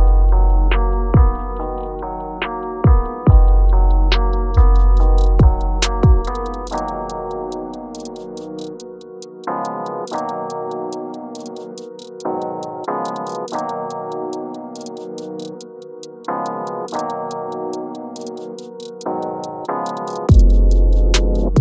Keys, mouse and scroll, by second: 2.0 click, 5.5 click, 6.4 scroll down 1, 8.4-8.9 scroll up 1, 8.9 click, 16.8 scroll down 1, 18.8 scroll down 1, 21.3-21.6 scroll up 1.